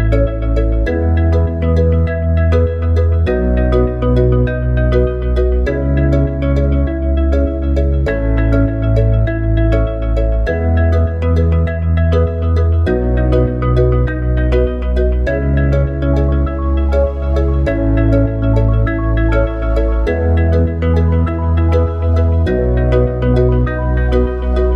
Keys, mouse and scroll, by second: 14.3-16.1 drag.